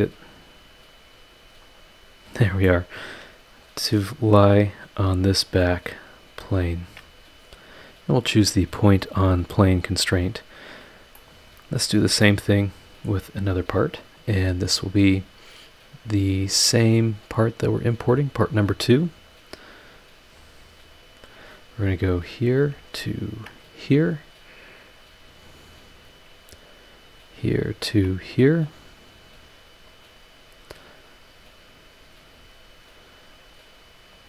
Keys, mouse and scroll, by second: 1.6 click, 2.3 scroll down 2, 2.6-4.1 drag, 2.6-4.1 middle drag, 4.5 scroll up 1, 5.4 ctrl+click, 5.9 ctrl+click, 6.6 ctrl+click, 9.0 click, 10.3 click, 10.7 scroll down 2, 11.1-12.0 middle drag, 12.2-13.2 middle drag, 13.3 scroll down 2, 13.7-14.1 scroll up 2, 14.3 scroll down 1, 16.5 click, 18.3 click, 19.8 click, 20.3-21.1 scroll up 2, 21.8 click, 22.1 scroll down 1, 23.3 ctrl+click, 24.8 click, 26.0 click, 27.1 click, 27.8 ctrl+click, 28.9 click, 29.9 click, 30.3 scroll down 2, 32.3 scroll up 2, 34.1 click.